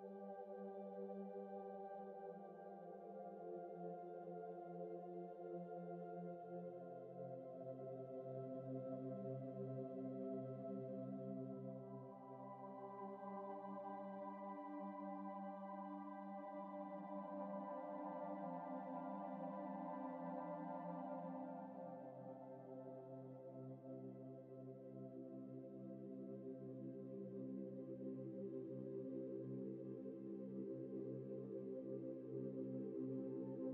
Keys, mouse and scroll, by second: 1.1 ctrl+space, 1.1 ctrl+click, 1.3 ctrl+space, 1.9 ctrl+-, 2.2 ctrl+-, 2.4 ctrl+-, 3.4 ctrl+-, 3.9 space, 4.5 ctrl+-, 5.3 ctrl+alt+click, 5.6 ctrl+space, 5.9 ctrl+z, 6.1 ctrl+space, 6.2 ctrl+click, 6.3 ctrl+space, 6.8 shift+click, 7.3 ctrl+z, 7.6 ctrl+space, 9.2 Tab, 10.1 Tab, 10.9 F7, 12.9 F7, 14.3 Tab, 14.5 Tab, 14.7 space, 15.2 Return, 16.0 ctrl+click, 16.1 ctrl+space, 17.3 typing, 18.4 ctrl+t, 18.9 alt+shift+click, 21.5 Return, 21.9 typing, 25.3 ctrl+j, 25.5 typing, 27.8 typing, 28.9 Return, 29.8 ctrl+e, 30.5 ctrl+space, 32.3 ctrl+j, 32.6 typing.